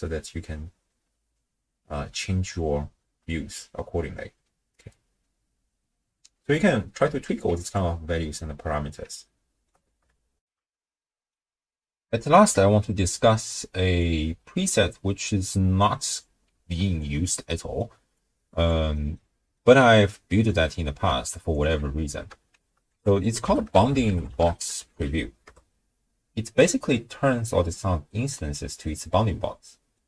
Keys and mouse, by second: 7.5 q, 9.3 ctrl+click, 10.4 ctrl+alt+shift+w, 10.5 ctrl+alt+shift+q, 14.2-15.3 drag, 16.2 click, 17.3 middle click, 17.7 click, 18.1 click, 19.0 middle click, 19.6 middle click, 21.5 ctrl+alt+click, 22.9 ctrl+a, 28.3-28.9 drag, 28.3-28.9 right drag, 29.7 click, 29.7 right click.